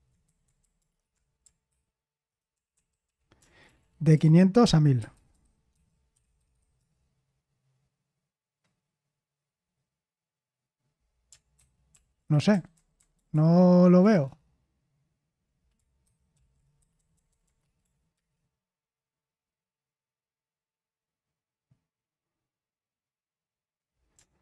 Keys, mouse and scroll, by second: 0.2 ctrl+c, 1.7 ctrl+p, 1.7 Left, 2.5 Left, 2.7 c, 3.3 ctrl+w, 3.6 Right, 3.8 Right, 4.1 BackSpace, 5.3-7.2 typing, 14.2 Return, 16.0 ctrl+c, 16.3 ctrl+p, 16.8 Left, 16.9 Left, 17.2 Left, 17.8 Left.